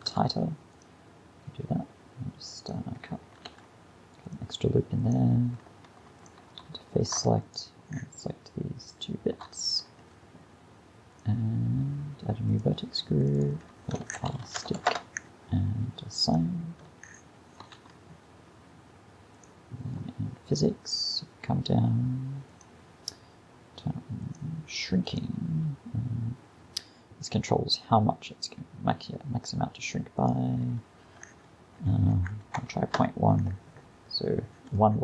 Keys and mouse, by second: 0.1 ctrl+r, 3.5 ctrl+r, 5.7 ctrl+Tab, 6.7 a, 7.0 a, 17.7 Tab.